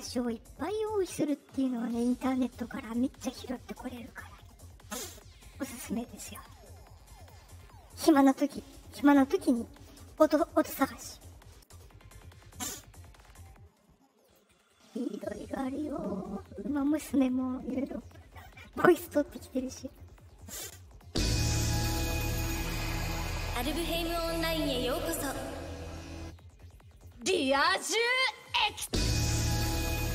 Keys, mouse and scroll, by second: 1.1 click, 2.3 click, 6.2 click, 7.1 click, 11.6 click, 14.2 click, 19.8 click, 20.9 click, 26.9 click, 28.6 click.